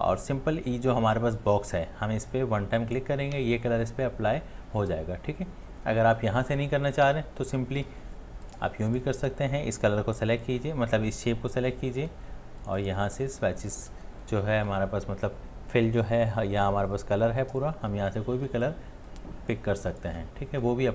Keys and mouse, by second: 7.0 ctrl+z.